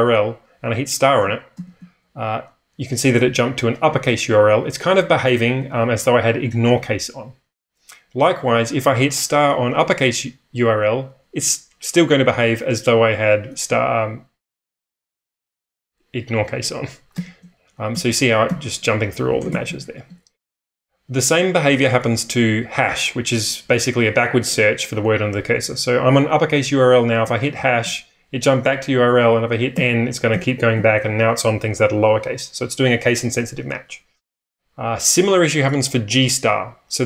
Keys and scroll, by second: 1.5 shift+8, 17.1 *, 17.9 n, 18.4 n, 19.5 shift+n, 19.6 shift+n, 27.5 #, 29.7-30.7 typing.